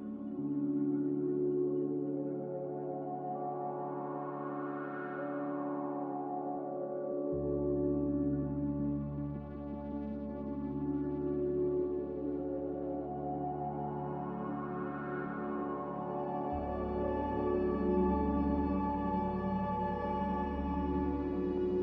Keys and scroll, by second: 3.3 a, 7.9 z, 10.5 typing, 10.8 Return, 13.4 typing, 14.2 Return, 17.7-19.0 typing.